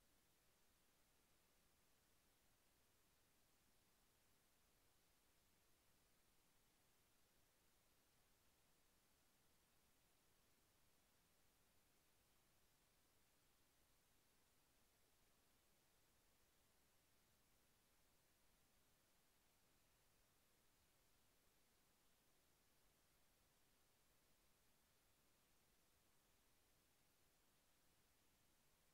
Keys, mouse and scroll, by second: 1.3 click, 4.1 click, 10.0 click, 11.9 click, 13.6 click, 21.5 click, 28.7 click.